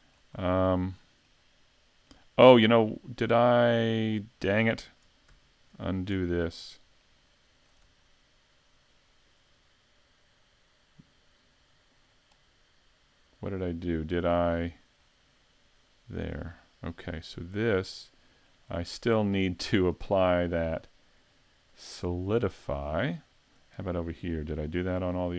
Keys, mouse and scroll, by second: 0.4-0.7 scroll up 2, 0.7 shift+middle click, 2.1 middle click, 5.3 super+z, 6.6-7.2 scroll down 3, 7.0 middle click, 12.1 click, 14.1 middle click, 15.0 scroll up 4, 17.3 right click, 17.7 middle click, 18.7-19.6 scroll down 7, 19.4 middle click, 21.7 click, 22.9 scroll up 4, 23.7 right click, 25.1 right click.